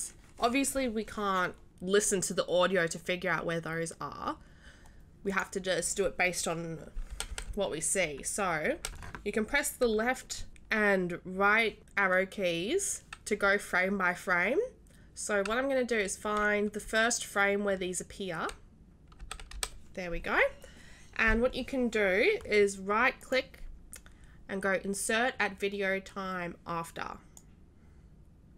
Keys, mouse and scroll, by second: 2.0 click, 5.3 click, 23.2 right click, 27.3 click.